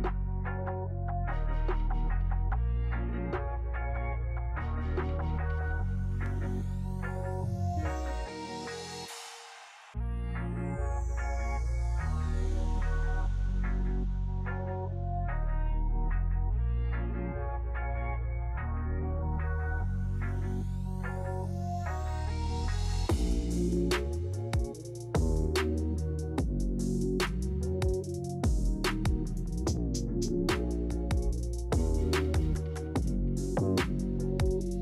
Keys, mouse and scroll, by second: 2.4-3.4 drag, 3.6-4.6 drag, 9.0 click, 9.7 space, 26.5-27.5 drag, 28.4-29.4 drag, 32.1-33.9 drag, 34.4 click.